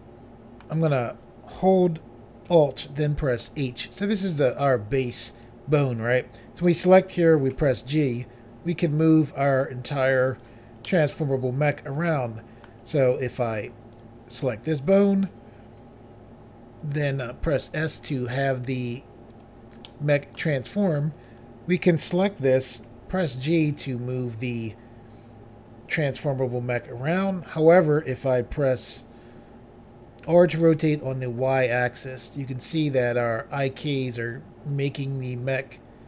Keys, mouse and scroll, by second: 3.4 alt+h, 5.3 click, 6.0 click, 7.5 g, 10.3 right click, 10.8 middle click, 13.9 click, 14.0 click, 17.2 s, 19.3 click, 19.4 click, 19.9 middle click, 21.3 click, 21.4 click, 22.9 g, 27.1 right click, 27.3 right click, 30.3-30.8 typing.